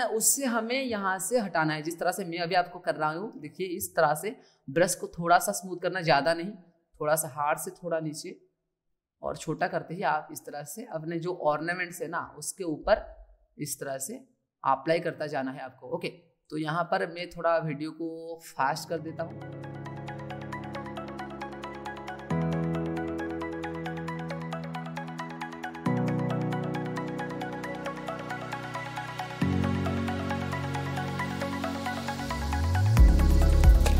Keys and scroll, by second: 24.3 ctrl+z, 26.7 ctrl+z.